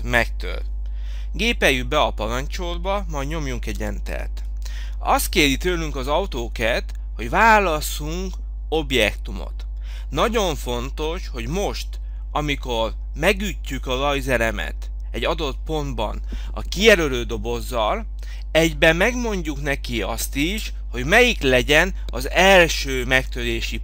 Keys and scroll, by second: 4.1 Return.